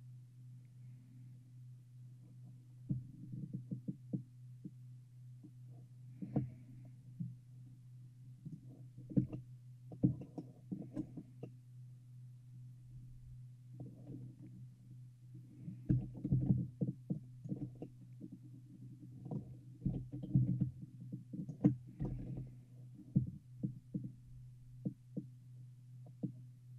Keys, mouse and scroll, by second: 9.6-13.4 shift+middle drag, 16.0 g, 17.9-19.5 middle drag, 20.0 g, 22.1 g.